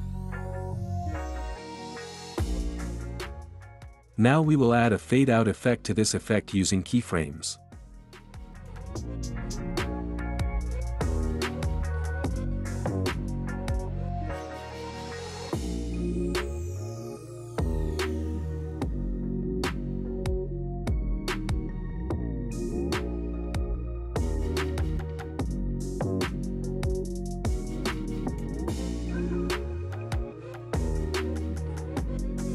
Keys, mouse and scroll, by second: 0.3 click, 1.5 click, 2.3 space, 6.8 space, 8.9-11.8 drag, 12.8-13.8 drag, 14.1-15.1 drag, 15.9-17.0 drag, 19.7-21.6 drag, 22.7-24.1 drag.